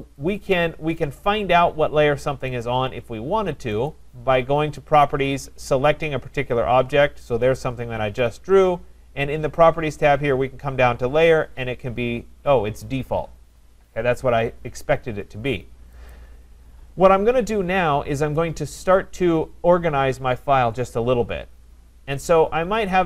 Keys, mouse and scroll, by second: 0.4 click, 2.6 click, 3.9 click, 6.5 click, 16.1 click, 22.9 click.